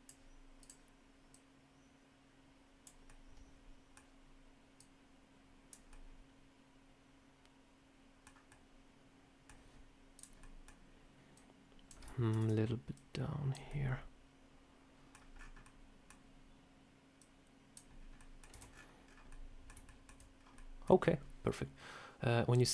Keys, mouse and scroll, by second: 1.2 click, 2.9 middle click, 4.6 click, 5.8 middle click, 8.4 middle click, 10.0 click, 10.3 middle click, 11.2 click, 12.2 ctrl+z, 12.8 click, 13.6 middle click, 15.2-15.7 scroll up 5, 15.5 middle click, 17.1 click, 17.9 scroll down 1, 18.1 middle click, 18.4 Tab, 18.6-19.4 scroll down 9, 19.2 middle click, 19.7 shift+middle click, 20.2 scroll down 1, 20.4 middle click, 22.4 scroll up 1.